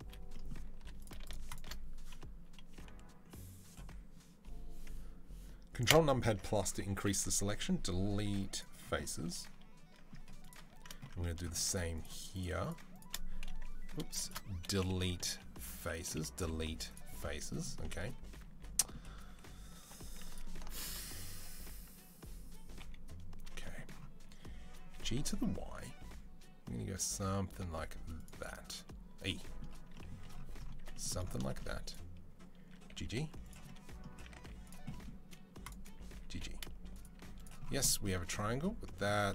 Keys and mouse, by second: 0.6 3, 5.3 ctrl+click, 5.7 ctrl+KP_Add, 6.1-11.8 middle drag, 8.4 Delete, 10.2 click, 11.8 shift+click, 11.8 shift+middle click, 12.1 shift+click, 12.2 shift+middle click, 12.8-14.1 shift+drag, 14.1-31.6 shift+middle drag, 16.2 Delete, 18.2 2, 19.0 1, 19.6 2, 22.6 KP_3, 24.7 g, 30.6 1, 31.6 click, 31.7-35.4 middle drag, 32.7 g, 34.2 z, 35.4 click, 35.5-39.3 middle drag, 35.9 g, 36.9 z, 38.0 a.